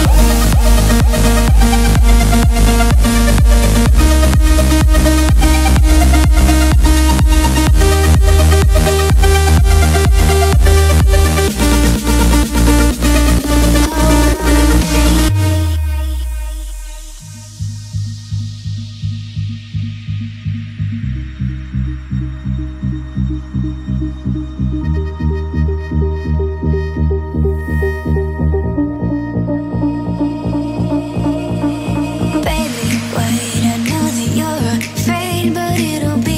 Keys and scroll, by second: 2.7 Left, 5.9 Left, 28.0 Right, 29.7 Right, 30.9 Left, 32.4 Left, 33.1 Right, 34.2 Right.